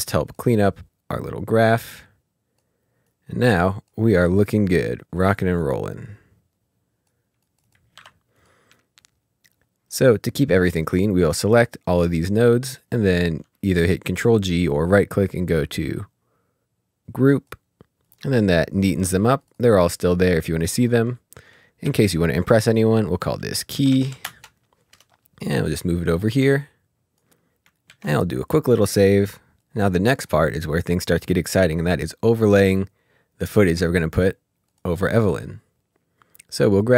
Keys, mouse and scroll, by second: 5.4 click, 8.4 click, 10.5 click, 14.3 right click, 17.3 right click, 17.5 click, 19.8 click, 21.8 F2, 23.5 F2, 23.7-24.0 typing, 24.2 Return, 25.3 click, 26.3 click, 30.2 click, 34.7 click, 36.4 click.